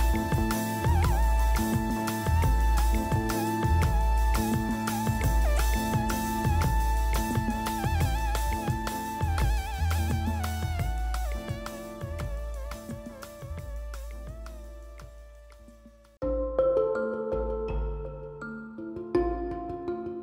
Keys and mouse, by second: 0.0-2.3 typing, 2.9 middle click, 6.2 z, 6.9 z, 7.1 z, 8.5 z, 9.6 ctrl+i, 9.7 z, 10.8 click, 11.0 click, 11.7 z, 12.1 click, 12.9 z, 13.8 z, 13.9 z, 15.5 middle click, 16.1 z, 16.5 z, 16.9 z, 18.4 z, 19.4 ctrl+z.